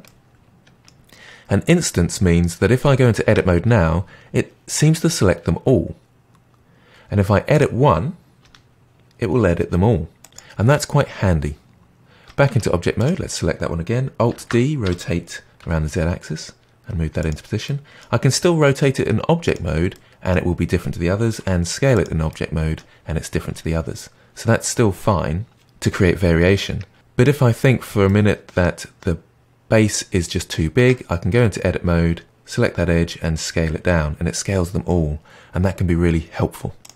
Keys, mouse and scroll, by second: 0.0-3.0 middle drag, 3.2 Tab, 7.5 click, 8.3 r, 12.4 Tab, 12.9 click, 14.3 alt+d, 17.6-18.2 middle drag, 18.2 r, 19.9-21.2 middle drag, 21.2 s, 22.2-25.3 middle drag, 28.0-30.7 middle drag, 30.7 Tab, 32.2 click, 32.9 s.